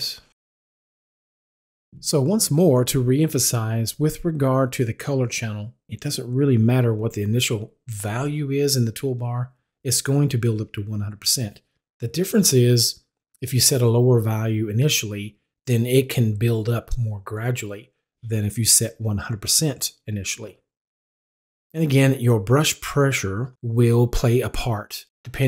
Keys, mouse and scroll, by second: 7.9 click, 10.1-15.7 drag, 20.2-25.4 drag.